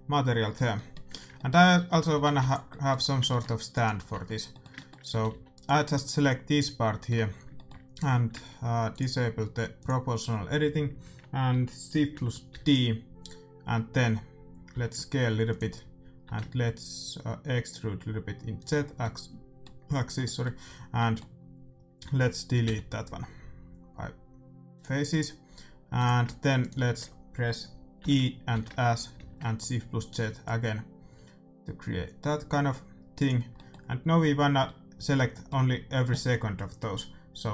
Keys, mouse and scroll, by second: 1.8 a, 2.1 a, 2.3 ctrl+s, 3.7-5.4 right drag, 4.1 Tab, 5.0 a, 5.4 a, 5.6-7.4 right drag, 5.8-10.4 middle drag, 8.9-10.8 drag, 12.5 shift+d, 14.6 s, 16.2 e, 18.9-23.4 middle drag, 22.6 x, 26.0-27.7 drag, 26.5-28.3 right drag, 27.9 e, 28.5 s, 33.5-37.4 middle drag.